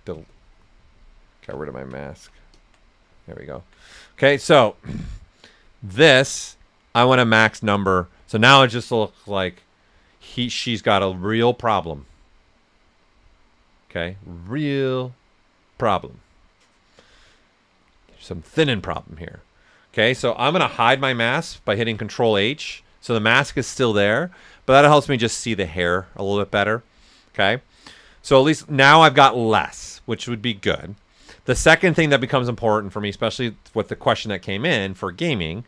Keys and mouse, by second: 0.3-1.6 ctrl+drag, 1.6 typing, 2.0 alt+right click, 2.5 alt+click, 3.5 alt+right click, 21.6 ctrl+h, 22.1 right click.